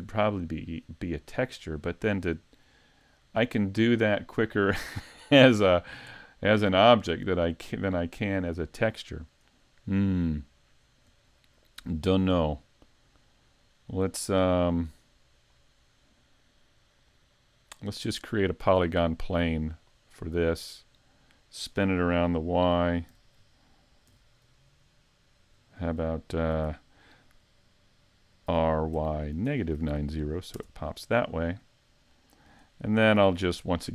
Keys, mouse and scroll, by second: 4.0-4.6 scroll up 3, 4.6 middle click, 5.7-6.2 scroll down 1, 6.2 middle click, 9.7 shift+middle click, 10.8-11.3 scroll up 3, 11.3 shift+middle click, 13.1 right click, 15.4 click, 16.4 middle click, 19.9 click, 20.4-20.9 scroll up 2, 20.9 scroll down 1, 21.0 scroll down 2, 21.5 middle click, 23.1 r, 28.5 r, 32.1 middle click, 33.7 click.